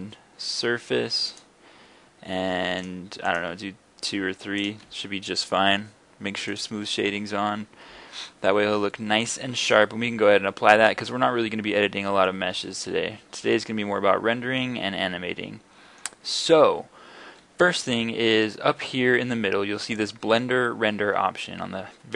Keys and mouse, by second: 2.8-10.4 drag, 10.5 click, 10.7 click, 10.8 middle click, 10.9-11.4 drag, 11.4 middle click, 11.5 click, 12.4-13.0 middle drag, 14.2-15.1 middle drag, 15.1 middle click, 15.3 middle click, 16.1-19.9 middle drag.